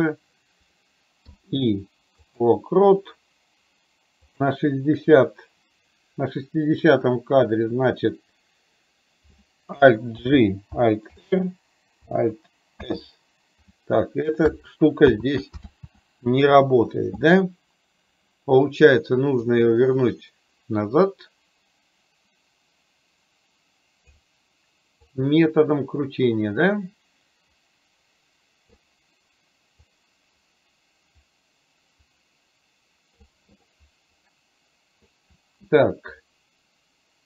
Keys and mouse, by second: 4.4 click, 10.2 alt+g, 11.2 alt+r, 12.8 alt+s, 15.2 ctrl+z, 15.8 ctrl+z, 19.7-24.3 drag, 25.1-28.9 drag, 30.1-33.4 drag, 33.7-35.1 middle drag.